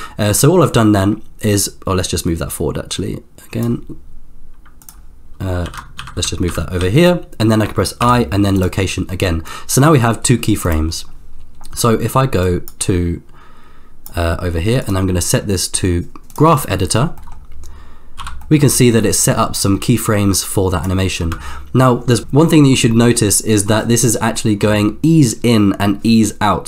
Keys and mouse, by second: 4.8 click, 5.6 shift+f, 8.0 i, 9.5-10.9 drag, 12.8-14.3 drag, 14.9-16.4 drag, 17.3 middle click, 18.1 n, 20.3 click, 21.4-22.3 space, 24.6 space.